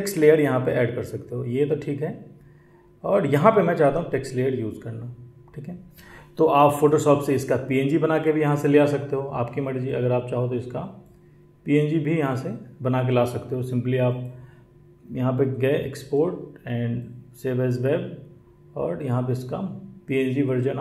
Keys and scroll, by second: 5.6 space.